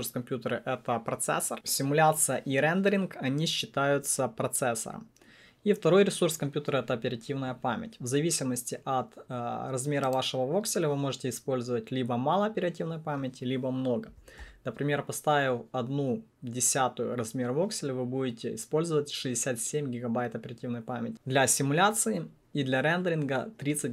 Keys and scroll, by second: 14.1 BackSpace, 14.1 1, 14.4 Return.